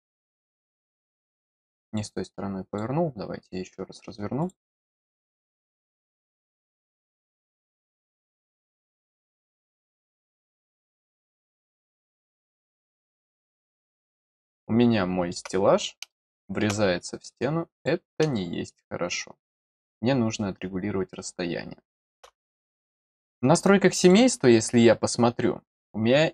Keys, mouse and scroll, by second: 0.6 click, 1.8 click, 2.7 click, 4.4 click, 4.5 click, 5.9 click, 7.8 click, 10.1 click, 11.6 middle click, 13.3 click, 13.4 click, 14.4 middle click, 16.0 middle click, 17.7 click, 18.3-22.1 middle drag, 24.0 click.